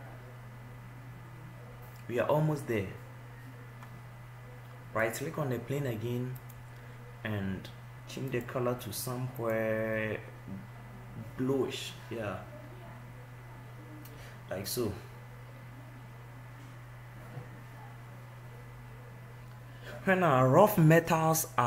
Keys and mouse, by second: 5.6 right click, 8.4 click.